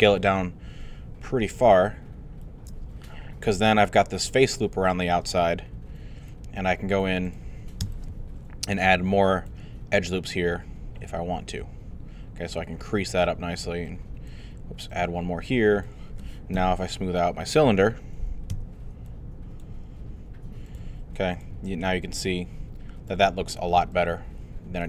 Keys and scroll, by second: 16.5 3, 18.5 q.